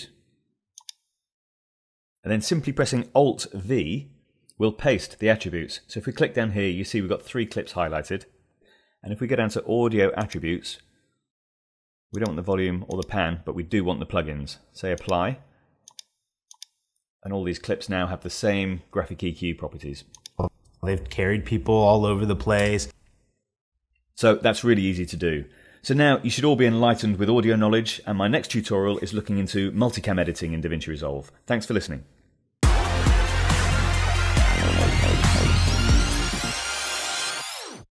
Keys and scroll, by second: 2.9 alt+v.